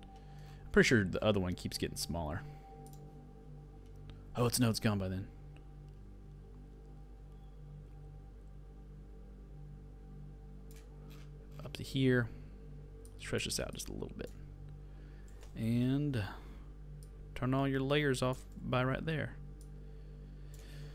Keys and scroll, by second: 18.6 alt+].